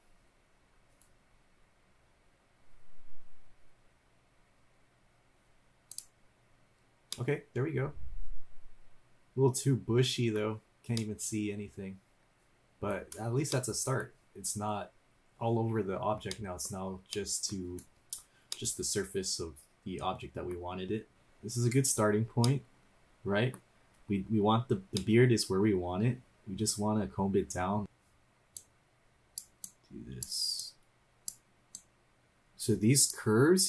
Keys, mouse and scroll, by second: 7.1-10.4 middle drag, 10.7 scroll down 2, 10.9-13.0 middle drag, 13.2 scroll up 2, 13.5 middle click, 16.3 middle click, 17.1 middle click, 18.1 scroll down 1, 18.5-20.5 middle drag, 20.9 scroll down 1, 21.1 middle click, 21.1 scroll up 1, 22.4-23.5 middle drag, 24.9-27.8 middle drag, 27.8 click, 28.5-29.4 drag, 29.7-30.2 drag, 30.6-31.3 drag, 31.8-33.1 drag.